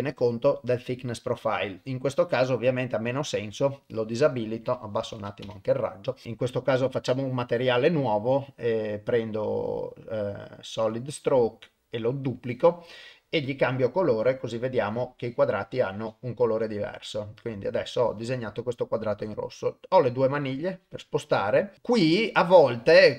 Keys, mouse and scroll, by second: 3.1 click, 4.7 click, 7.4 click, 8.8-11.1 drag, 12.3 click, 13.9 click, 17.1-23.1 drag.